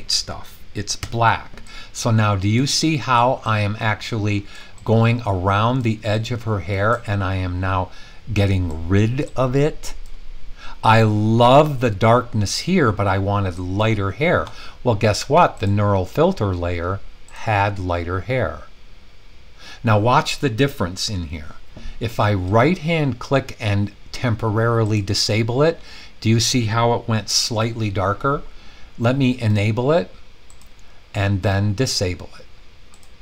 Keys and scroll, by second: 1.0 x.